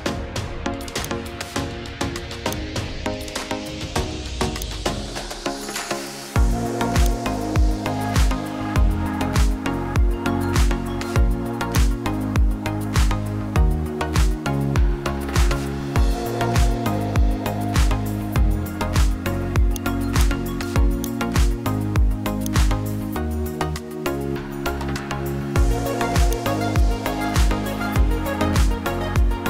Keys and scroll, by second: 9.7-10.8 typing.